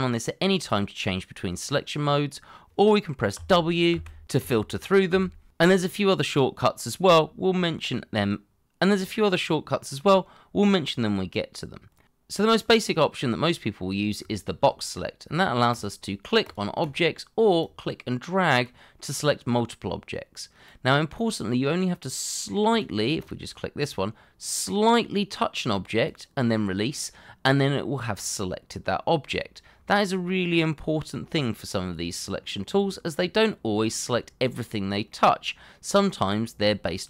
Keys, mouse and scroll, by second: 3.3 w, 4.4 w, 12.0 middle click, 12.9 shift+middle click, 14.2 shift+middle click, 16.8 double click, 33.1-33.6 scroll up 1, 33.7 shift+middle click, 35.1 middle click, 36.6 shift+middle click.